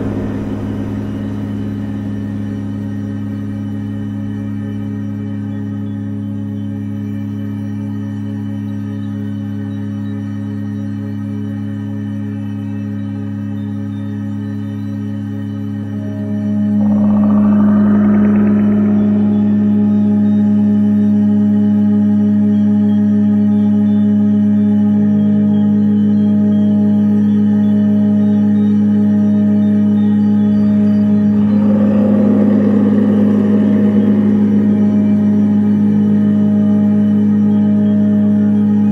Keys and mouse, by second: 5.8-6.5 drag, 9.2 click, 10.8 shift+a, 15.1-16.5 drag, 17.6 click, 19.8 shift+a, 22.0 click, 24.1-26.2 drag, 29.3 click, 30.9 click, 31.7 click, 33.1 click, 33.4-34.8 drag, 35.9-37.3 drag, 37.7-38.9 drag.